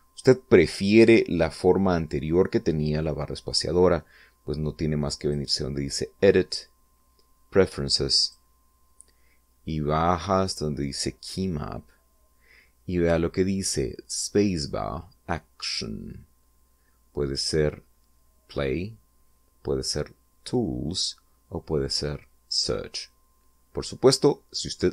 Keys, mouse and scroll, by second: 5.1 click, 8.1 click.